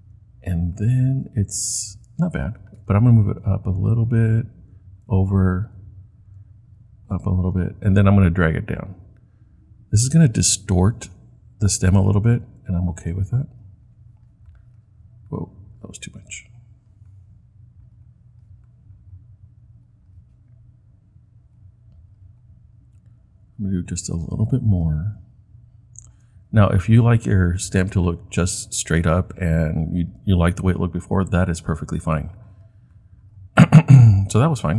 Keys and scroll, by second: 4.8 Right, 5.1 Right, 12.1 Right, 12.4 Right, 12.9 Right, 13.4 Left.